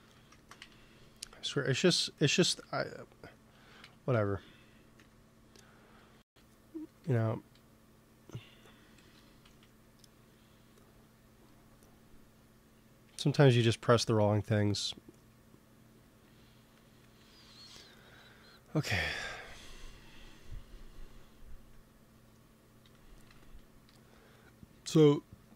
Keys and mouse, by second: 0.5 z, 1.3 z, 2.3 g, 3.7 z, 4.0 Tab, 4.9 Tab, 6.8 g, 8.3 click, 9.0 KP_1, 9.3 z, 11.6 click, 11.9-13.3 drag, 13.3 Tab, 13.7-16.9 drag, 18.0 t, 19.1-24.5 drag, 23.8 t.